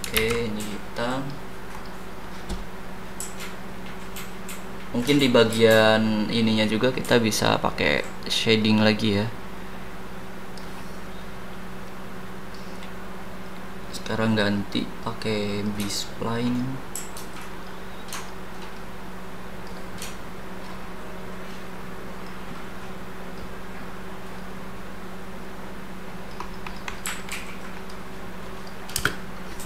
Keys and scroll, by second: 0.1 ctrl+z, 28.9 space.